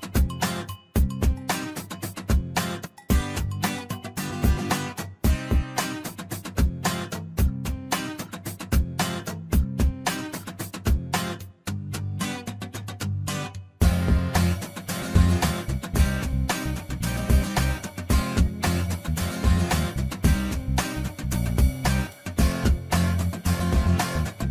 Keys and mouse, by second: 0.6 click, 2.3-3.4 drag, 3.7 shift+middle click, 4.1 click, 4.5 click, 4.7 click, 6.5 shift+middle click, 9.3 click, 10.4 click, 11.5 middle click, 12.2 shift+middle click, 13.0 click, 13.4 shift+middle click, 14.8 click, 16.9-19.5 ctrl+drag, 20.5 click, 22.0 shift+middle click, 22.7 click, 23.0 shift+middle click, 23.4 middle click.